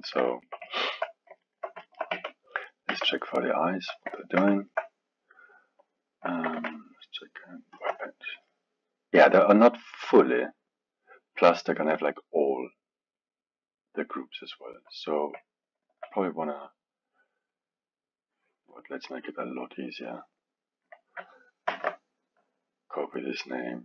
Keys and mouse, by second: 2.1 Tab, 2.6 click, 2.9 Tab, 3.7-6.7 middle drag, 6.7 ctrl+Tab, 8.5-11.4 middle drag, 11.4 click, 13.2-15.2 drag, 15.9 shift+click, 17.5-22.9 drag.